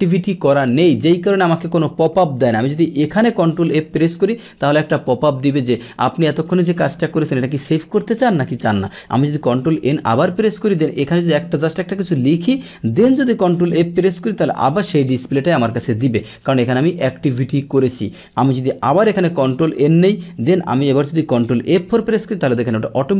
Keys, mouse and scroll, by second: 3.2 ctrl+F4, 4.9-5.6 drag, 8.7 click, 9.8 ctrl+n, 11.9 Return, 14.5 ctrl+F4, 17.7 click, 18.5 click, 18.9 ctrl+n, 21.5 ctrl+F4.